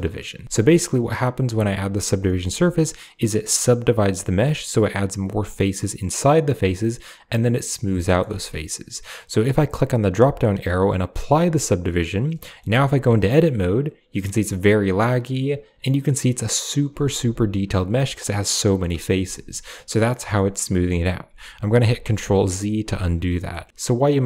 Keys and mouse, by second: 0.0 Tab, 0.4 z, 0.6 middle click, 2.1 shift+middle click, 7.9 middle drag, 9.7-11.6 drag, 12.3 middle click, 15.0 Tab, 16.3 middle click, 17.0 ctrl+middle click, 17.9 ctrl+click, 18.4 ctrl+middle click, 19.6 Tab, 20.1 middle click.